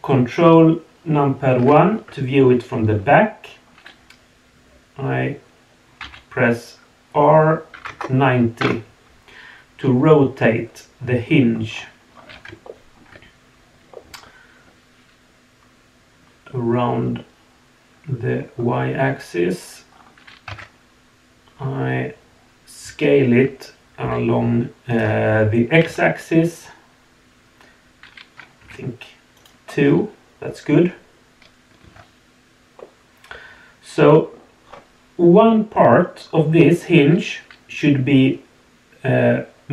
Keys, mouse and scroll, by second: 1.6 ctrl+KP_1, 9.8-11.2 middle drag, 11.7-12.0 scroll up 2, 12.1 scroll down 1, 12.6-13.0 shift+middle drag, 13.9 middle drag, 14.2 click, 14.3 middle click, 14.4 click, 14.5 middle click, 14.6 click, 14.7-18.4 middle drag, 19.9 scroll down 2, 20.5 Tab, 21.5 scroll up 2, 22.8 s, 25.7 s, 29.8 scroll down 2, 31.8 Tab, 32.7-34.3 middle drag, 34.6 scroll up 2.